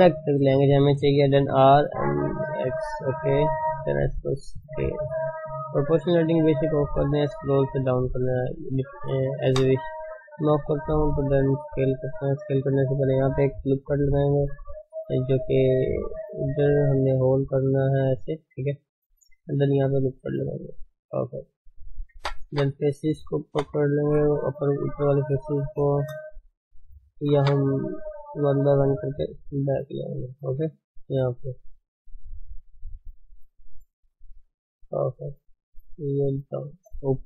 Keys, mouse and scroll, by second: 1.1 r, 3.6 s, 9.6 o, 10.6 s, 16.3 g, 21.3 ctrl+r, 22.5 3, 22.8 click, 24.7 ctrl+space, 24.9-25.3 scroll up 1, 25.3 shift+z, 25.9 ctrl+space, 26.1 scroll up 1, 26.3 shift+middle click, 26.9 scroll down 2, 27.3 1, 28.4 click, 29.3 g, 31.6 click, 31.9-32.2 scroll down 3, 33.6 click, 35.3 click, 36.9-37.2 scroll up 4.